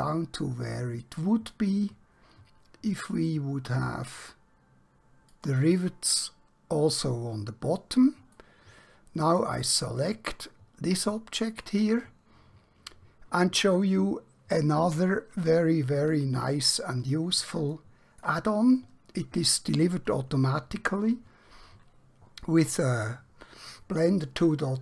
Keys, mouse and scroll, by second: 5.4 click, 8.5 middle click, 10.0 click, 11.0 scroll down 1, 11.9-12.5 scroll up 1, 12.5-14.0 scroll down 1, 14.0-16.2 scroll up 1, 17.8 shift+click.